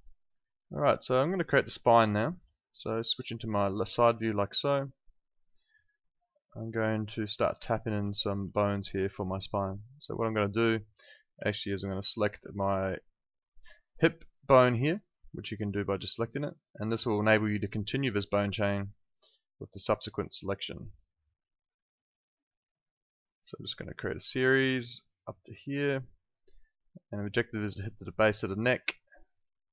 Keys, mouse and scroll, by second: 0.0 alt+right click, 0.2 alt+click, 1.1 alt+middle click, 1.3 alt+right click, 1.5 alt+click, 2.8 space, 3.1 click, 4.1 alt+middle click, 5.2 alt+right click, 5.7 alt+middle click, 5.9 alt+right click, 6.7 alt+middle click, 8.1 alt+middle click, 9.4 click, 11.4 alt+middle click, 11.7 alt+right click, 14.8 click, 19.1 click, 29.6 click.